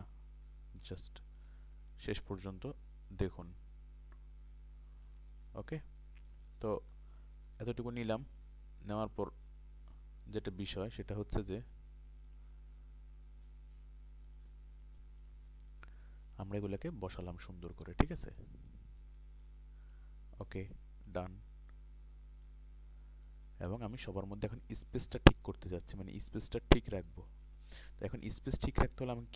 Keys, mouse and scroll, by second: 1.1 alt+shift+click, 3.4 alt+shift+click.